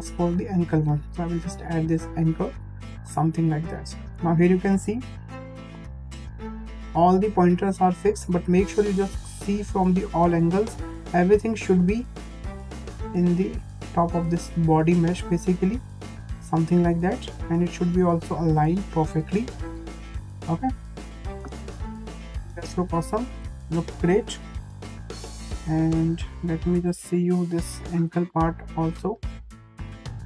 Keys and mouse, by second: 4.8 `, 6.7-7.0 shift+middle drag, 9.1 click, 9.2-9.5 drag, 10.5 click, 11.4-11.7 drag, 12.3 click, 12.4-13.9 drag, 15.0 click, 15.2 click, 18.3 click, 18.5-20.4 drag, 22.1-23.2 middle drag, 25.4 shift+middle click, 26.3 `, 28.2 click, 28.9 click, 29.0-29.9 drag.